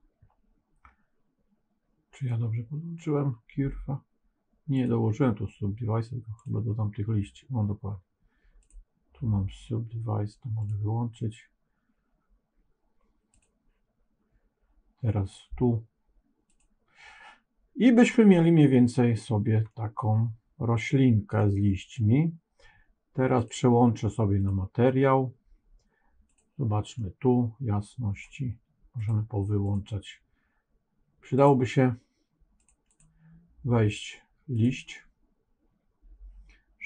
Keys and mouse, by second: 4.7-6.5 drag, 10.5 click, 16.4 click, 19.0 click, 19.6-21.3 middle drag, 23.4-24.7 drag, 26.2 click, 26.9-28.1 middle drag, 28.9 click, 29.5 click, 31.3 click, 32.5 click, 32.8 click.